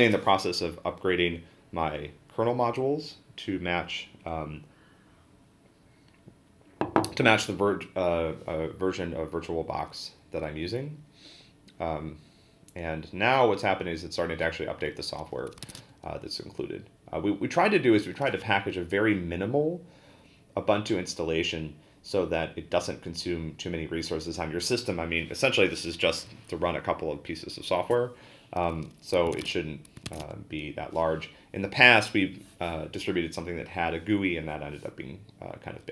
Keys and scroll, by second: 15.6 ctrl+a, 15.8 n, 29.3 ctrl+a, 29.8-30.7 typing.